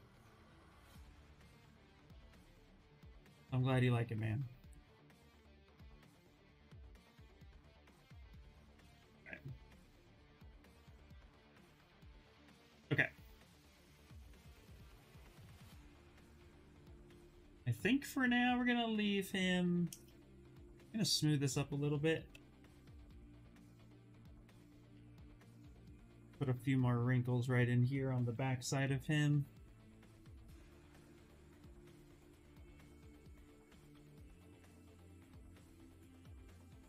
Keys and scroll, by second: 0.5 d, 1.6-2.5 typing, 6.7 s, 9.6 s, 11.6 d, 22.0 b, 22.5 s, 27.9 b, 28.4 s, 29.6 b, 30.0 s, 30.8 s, 36.5 ctrl+z.